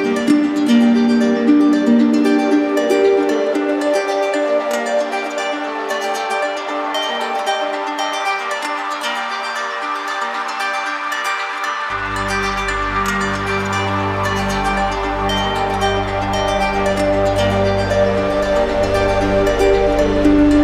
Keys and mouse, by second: 4.4 click, 6.3 click, 7.2 alt+click, 7.7 z, 8.6 click, 10.8 click, 11.3 alt+click, 13.6 right click, 15.5 click, 16.8 click, 17.2 click, 18.3 alt+right click, 19.5 right click.